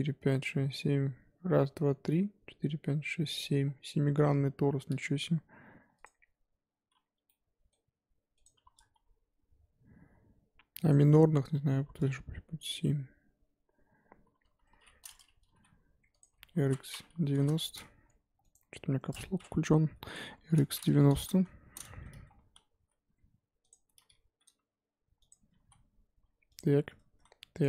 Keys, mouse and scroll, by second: 3.6-4.1 scroll down 1, 4.1-6.2 scroll down 5, 7.2-8.8 middle drag, 8.8-14.4 drag, 14.4 KP_1, 15.5 g, 16.5 r, 21.6-22.3 scroll up 10, 22.3 Tab, 22.7 s, 23.8 Tab, 24.2 g, 25.4 Tab, 25.6 s, 27.1 s.